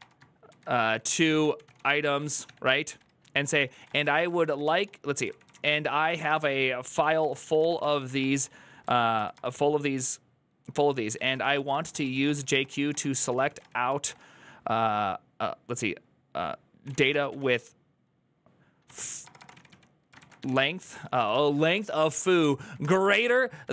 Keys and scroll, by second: 0.0-14.3 typing, 16.4-23.7 typing.